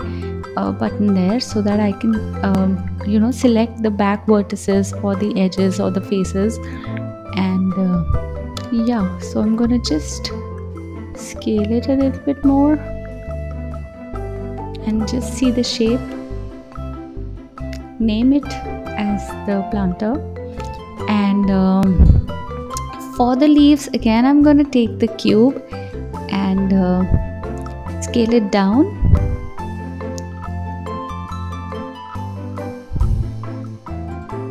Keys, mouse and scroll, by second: 1.0 click, 1.4 click, 2.2 g, 4.7-5.8 drag, 8.1 click, 9.0 click, 10.5 click, 14.7 alt+z, 15.3 click, 16.8 click, 17.0-19.9 drag, 22.1 shift+a, 24.0 s, 25.4 g, 26.4 s, 28.2-31.1 drag, 31.1 KP_7, 32.1 click, 33.7 KP_1, 34.2 scroll up 4.